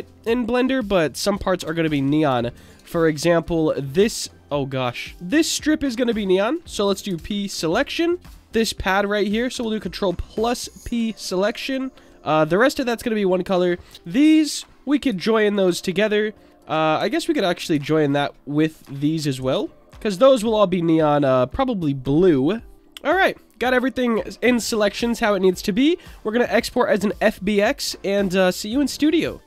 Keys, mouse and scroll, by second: 0.5-1.3 middle drag, 1.9 Tab, 5.8 middle click, 7.1 p, 7.9 Tab, 9.5 ctrl+KP_Add, 10.8 p, 12.0 Tab, 13.3 click, 14.0 click, 15.1 ctrl+j, 17.7 ctrl+j, 18.9 click, 19.8 ctrl+j, 22.7 Tab, 22.7 p, 23.6-24.2 middle drag, 25.0 drag, 26.8-29.4 drag.